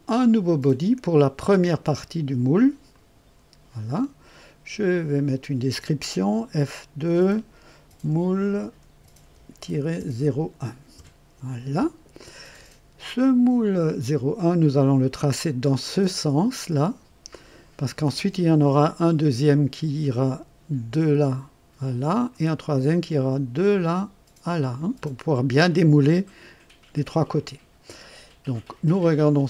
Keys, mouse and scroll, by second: 2.9 click, 5.1 click, 7.0 F2, 7.5-10.1 typing, 10.9 KP_Enter.